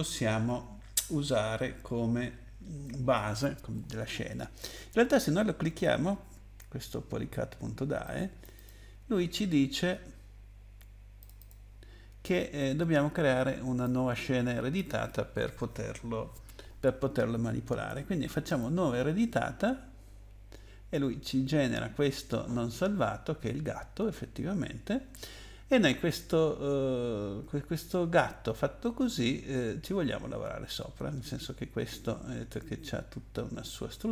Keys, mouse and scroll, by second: 8.0 click, 8.5 click, 8.6 click, 11.2 click, 11.4 click, 13.8 click, 18.4 click.